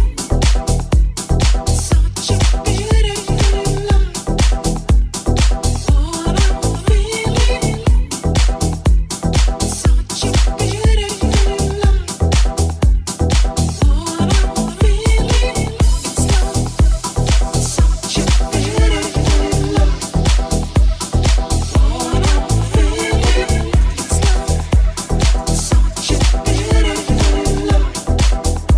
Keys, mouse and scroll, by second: 0.4 g, 7.7-11.7 middle drag, 10.3 shift+s, 11.7 right click, 11.9-28.3 shift+middle drag, 12.1 shift+s, 12.9 shift+a, 14.1 s, 14.9 r, 16.6 g, 18.4 Tab, 19.0 e, 22.5 Tab, 23.8 s, 27.5 Tab, 28.3 alt+right click, 28.4-28.7 alt+shift+middle drag.